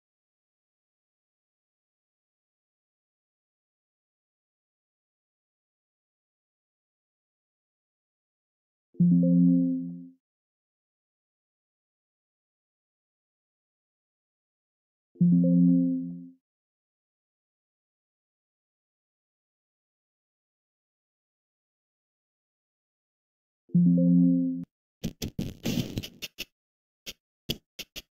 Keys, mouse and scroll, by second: 4.5 click, 6.0-6.5 scroll, 6.8 click, 9.5 click, 15.3 click, 18.0 click, 19.1 Delete, 20.2 click, 20.8 F2, 21.2 Right, 22.3 BackSpace, 23.5 Escape, 23.5 `.